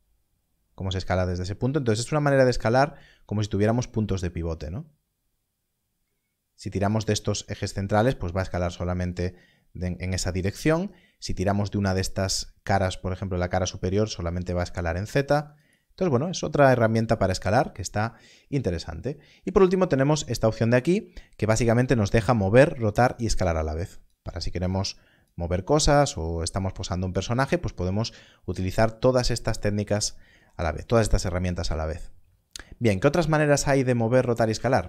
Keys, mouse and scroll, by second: 6.8 right click, 9.1 click, 10.4 right click, 13.8 click, 15.5 right click, 19.9 click, 22.7 scroll up 1, 23.8 click, 25.2 click, 29.5 click, 34.7 shift+click.